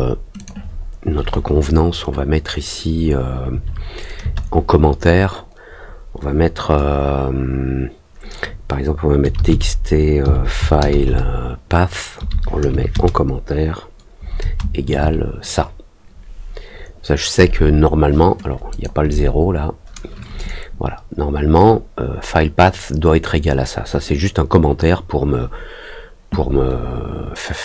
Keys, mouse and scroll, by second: 0.3 click, 18.6 click.